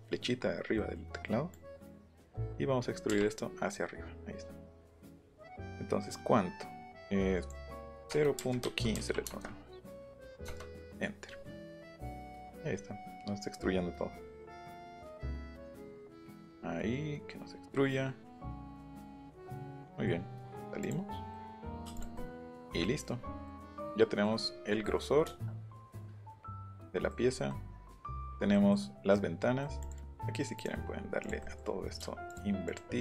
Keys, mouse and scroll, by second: 0.1 middle click, 0.3 middle click, 0.8 middle click, 1.5-7.5 drag, 3.1 Up, 8.1 KP_0, 8.3 KP_Decimal, 8.6 KP_1, 8.9 KP_5, 9.2 KP_Enter, 10.4 KP_Enter, 11.1 Return, 19.7 middle click, 20.8 click, 21.3 middle click, 21.9 click, 22.2 middle click, 29.8 click, 31.2 click, 31.5 middle click, 31.5 scroll up 2, 31.7 middle click, 31.8-32.1 scroll down 2, 32.3 shift+click, 32.7 shift+click.